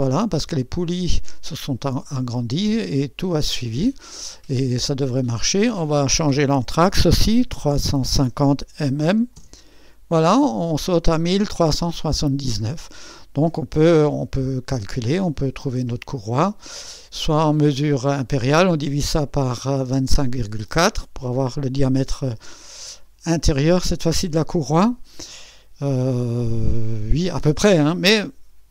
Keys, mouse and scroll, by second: 0.2 click, 1.6-2.9 drag, 3.8 click, 5.6 click, 7.6-9.1 typing, 9.3 Return.